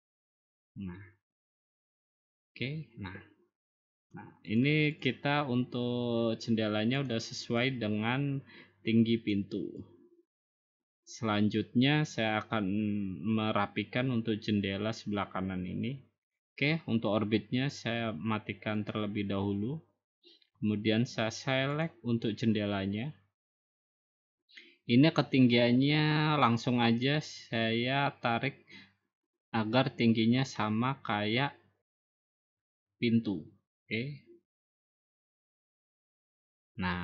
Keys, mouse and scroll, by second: 1.8 click, 3.9 click, 4.6 click, 5.0 click, 7.1 click, 9.3 click, 10.6 click, 11.2-11.6 scroll, 11.6 scroll down 4, 11.8-12.6 scroll up 2, 18.9 click, 21.8 click, 22.9-31.9 drag, 34.7-35.9 drag, 36.7 click.